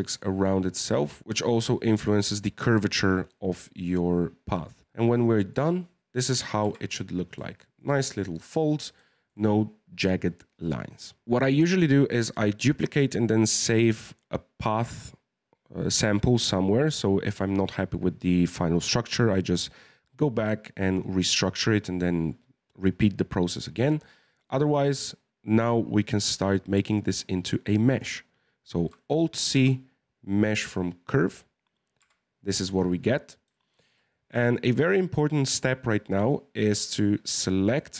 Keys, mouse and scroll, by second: 1.2 ctrl+t, 5.5-6.3 scroll down 1, 6.3 KP_1, 6.6 Tab, 7.2-7.5 scroll up 2, 7.5-11.2 shift+middle drag, 11.2-14.0 scroll down 2, 23.6-26.6 scroll up 1, 29.3 alt+c, 31.7 scroll up 1, 32.0 Tab, 32.7-33.5 scroll up 1, 33.5-36.5 shift+middle drag, 37.6 right click.